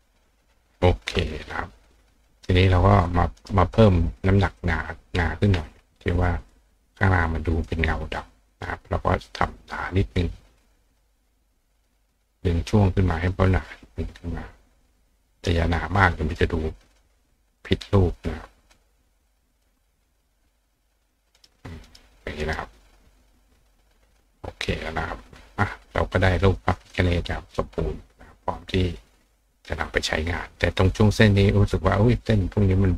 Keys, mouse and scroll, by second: 3.1 click, 3.4 right click, 4.6 click, 6.4 click, 7.5 click, 8.6 click, 10.1-11.9 drag, 12.7 click, 15.5 click, 17.6-18.7 drag, 19.2 click, 19.7 click, 21.1 click, 21.4 right click, 21.5 middle click, 21.9 right click, 22.4 right click, 26.4 click, 26.8 click.